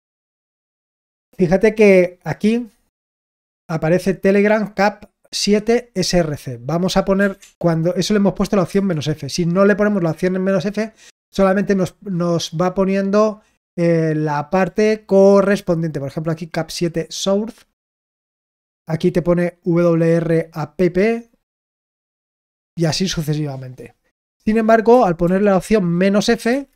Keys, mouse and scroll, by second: 4.0-24.4 drag, 24.6 click.